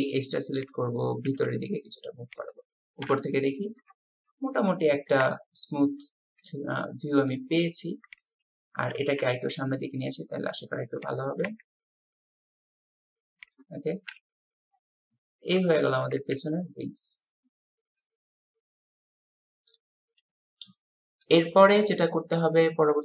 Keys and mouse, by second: 1.3 g, 3.1 KP_7, 3.2-4.3 middle drag, 5.3 shift+middle click, 6.4 click, 8.1 click, 9.2 g, 11.5 s, 14.1 KP_7, 15.6 Tab, 18.0-21.3 middle drag.